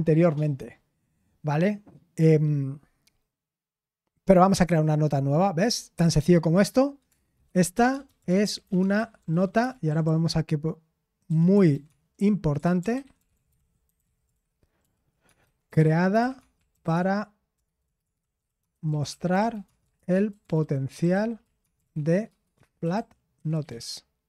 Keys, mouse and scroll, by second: 5.0 click, 7.2-24.2 typing.